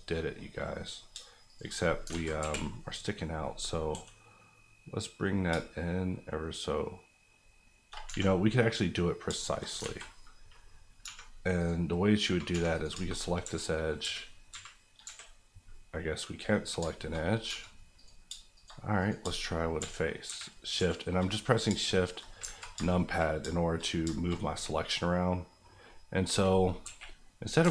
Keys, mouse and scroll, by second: 0.1 middle click, 0.4 scroll down 1, 0.7 middle click, 1.1 shift+middle click, 1.4 shift+click, 1.7 click, 2.1 alt+z, 2.4 KP_1, 3.4-3.9 scroll up 1, 3.9 g, 5.5 shift+g, 8.0 Escape, 9.3 shift+middle click, 9.8 alt+z, 10.1 middle click, 11.0 3, 11.6 click, 12.5 2, 12.7 click, 12.9 shift+click, 15.0 KP_7, 15.6 scroll down 1, 15.9 middle click, 16.8 shift+middle click, 17.2 middle click, 17.4 3, 17.9 click, 18.2 shift+click, 18.7 click, 19.2 shift+click, 20.3 shift+KP_1, 20.7 shift+KP_3, 21.3 KP_3, 21.6 shift+scroll down 1, 21.8 shift+middle click, 22.1-22.6 shift+scroll up 2, 22.6 z, 22.8 shift+middle click, 23.3 middle click, 23.4 shift+middle click, 23.5 shift+middle click, 23.9 middle click, 24.0 shift+middle click, 24.3 middle click, 24.6-26.1 middle drag, 26.8 KP_1, 27.6 alt+z.